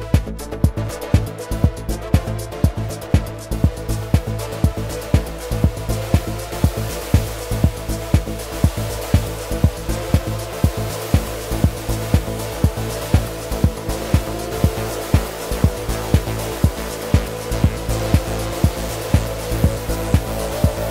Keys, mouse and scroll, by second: 0.1 click, 1.3 shift+click, 2.5 shift+click, 3.0 shift+click, 4.0 shift+click, 4.7 shift+click, 5.8 shift+click.